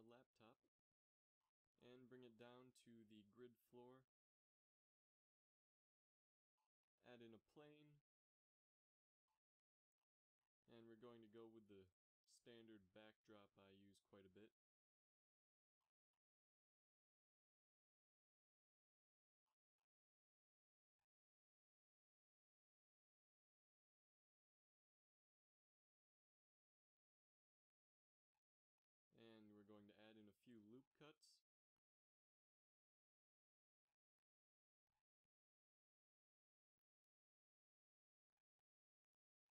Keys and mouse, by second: 1.6 KP_3, 1.9 z, 2.8 g, 5.9 a, 7.8 s, 10.3 KP_3, 10.6 Tab, 11.6 z, 12.0 ctrl+Tab, 12.8 a, 13.0 b, 14.3 g, 16.2 e, 16.8 e, 17.4 e, 18.8 e, 19.8 e, 21.8 a, 22.3 z, 24.2 ctrl+3, 25.7 ctrl+2, 26.8-27.9 middle drag, 28.8 ctrl+r, 29.6 ctrl+r, 30.8 click, 31.3 ctrl+r, 33.8 ctrl+r, 35.1 middle click, 36.1 Tab, 36.5 space.